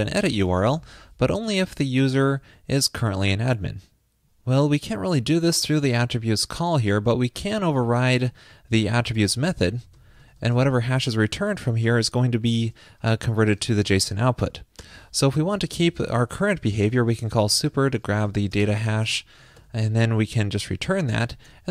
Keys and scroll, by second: 2.1 alt+shift+Left, 17.9 alt+Left, 19.7 super+Return, 21.4 super+Right.